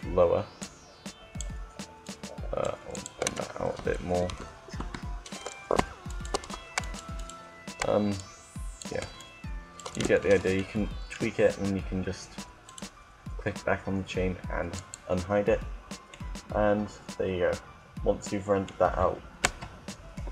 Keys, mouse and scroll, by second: 1.7-3.7 right drag, 4.1 Tab, 4.4 Tab, 5.8-6.9 right drag, 7.9-9.9 drag, 8.1-10.4 right drag, 9.9 Tab, 12.4-14.3 right drag, 14.9-16.4 drag, 16.4-17.8 middle drag, 19.3 KP_0.